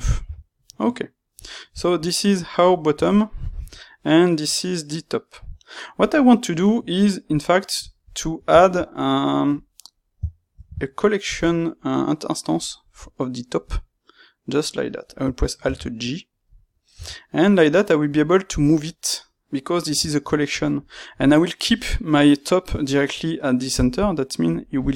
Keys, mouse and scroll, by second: 0.1 h, 2.3 click, 2.4-7.3 middle drag, 4.5 click, 7.3 click, 8.0-14.5 middle drag, 10.5 shift+a, 15.5 alt+g, 16.9 g, 18.5 click, 18.8 middle click, 24.5 click.